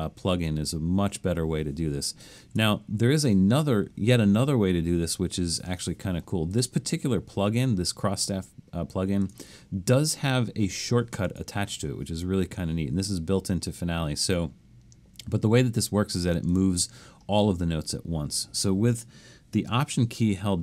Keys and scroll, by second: 2.4 super+z.